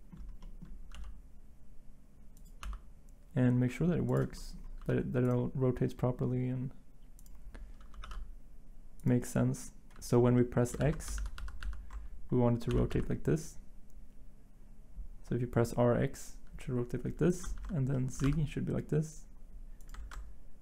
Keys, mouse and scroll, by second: 0.9 g, 2.6 r, 4.8 r, 7.9 r, 8.0 y, 10.8 ctrl+z, 11.1 ctrl+z, 11.3 ctrl+z, 11.6 ctrl+z, 12.7 r, 12.9 x, 17.5 ctrl+z, 18.2 r, 20.0 ctrl+z.